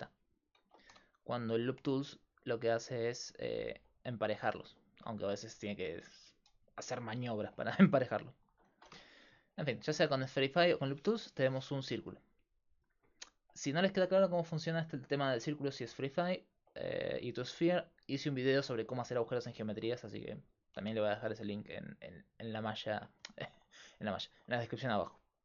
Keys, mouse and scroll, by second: 0.6 ctrl+z, 0.9 w, 5.9 ctrl+z, 6.3 ctrl+z, 6.7 ctrl+z, 7.0 ctrl+z, 8.0-9.8 drag, 8.7 alt+shift+s, 11.8 click, 12.0 s, 13.2 right click, 13.4 click, 14.3 click, 21.6-24.0 drag, 24.0 middle click, 24.7 middle click.